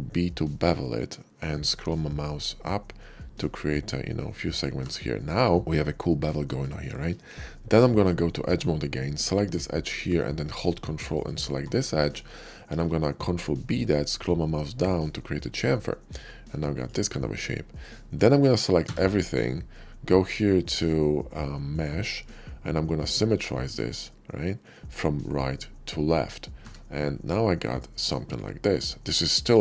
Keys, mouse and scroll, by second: 1.7 middle click, 3.4 middle click, 4.4 click, 4.7 Tab, 5.2-6.1 middle drag, 6.4 shift+middle click, 6.8 middle click, 7.8 Tab, 8.4 Tab, 9.0 click, 11.0 ctrl+click, 11.5 ctrl+middle click, 12.4 ctrl+b, 14.9 click, 16.6 click, 17.0 middle click, 18.1 shift+middle click, 18.7 a, 21.6 click, 23.2 click, 26.6 Tab, 27.0-29.6 middle drag.